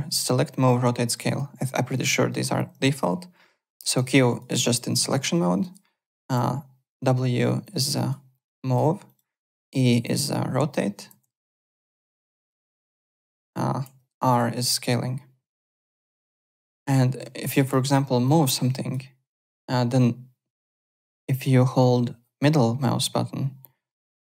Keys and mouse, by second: 1.3 alt+Tab, 1.9 alt+click, 2.3 alt+right click, 2.9 q, 3.9 q, 4.3 click, 6.4 w, 7.6 click, 8.4 click, 9.0 click, 9.6 e, 10.3 click, 11.1 ctrl+z, 11.4 click, 12.4 ctrl+click, 12.5 ctrl+z, 13.2 e, 13.8 r, 14.8 click, 15.9 click, 16.7 click, 17.4 alt+middle click, 17.7 alt+click, 18.2 click, 23.8 middle click.